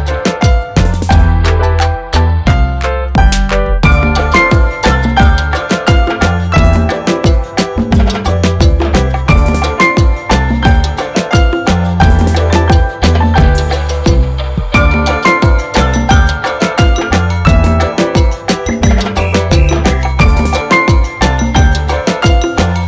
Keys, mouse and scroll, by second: 0.1 click, 0.5-0.8 scroll down 1, 1.6 ctrl+click, 3.3 click, 9.3 shift+click, 12.3 v, 13.7 ctrl+z, 16.2 scroll down 1, 16.6 click, 18.1 ctrl+click, 18.4 scroll down 1, 18.7 scroll up 1, 19.4 ctrl+click, 21.9 F8.